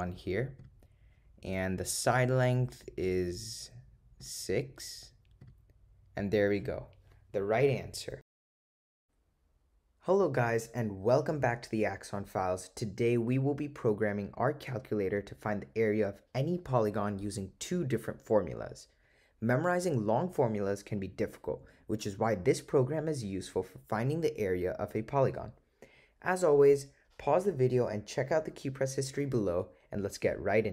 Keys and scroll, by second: 0.7 Return, 4.3 6, 5.5 Return.